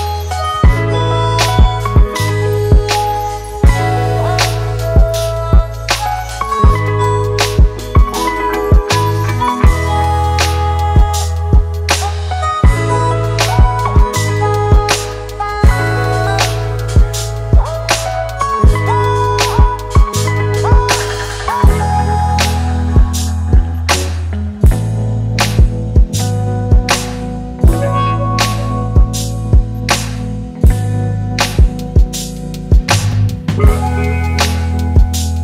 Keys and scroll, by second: 6.8 ctrl+t.